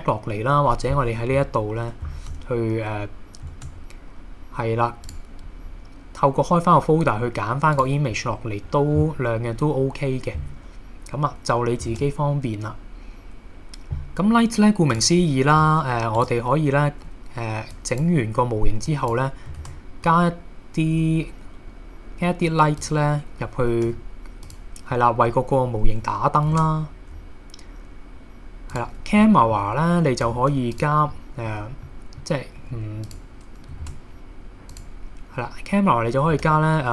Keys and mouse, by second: 3.5 shift+a, 11.9 shift+a, 15.6 s, 17.7 click, 18.9 click, 19.6 shift+a, 23.9 g, 24.4 click, 24.9 middle click, 26.5 shift+a, 29.2-29.6 middle drag, 30.2 g, 30.7 click, 31.1 middle click, 31.9-32.3 middle drag, 32.6 g, 33.1 click, 33.8 shift+a, 36.4 g.